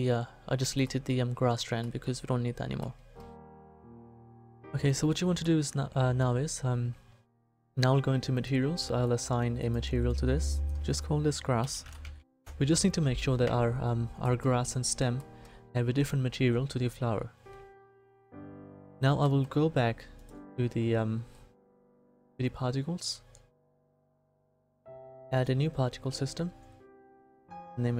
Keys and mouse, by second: 0.0 middle click, 8.3-9.8 middle drag, 12.2 s, 12.4-14.2 drag, 20.1-25.3 middle drag, 25.3-27.9 drag.